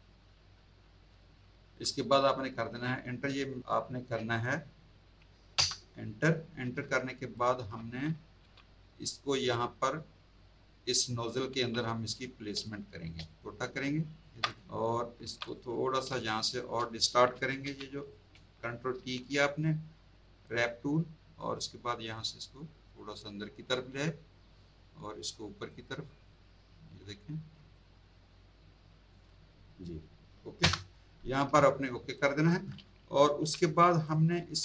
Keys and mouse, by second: 3.3 space, 5.5 Return, 6.6 z, 6.9 alt+click, 7.3 alt+click, 8.9 click, 11.4 z, 11.6 click, 12.5 space, 12.6 click, 13.4 shift+click, 15.2 z, 15.5 click, 16.1 space, 16.2 click, 18.0 click, 18.9 ctrl+t, 19.5 right click, 20.5 click, 21.4 click, 24.3 click, 26.2 click, 27.7 click, 30.6 Return, 31.3 z, 31.7 alt+click, 32.2 alt+click, 34.1 click, 34.4 Tab.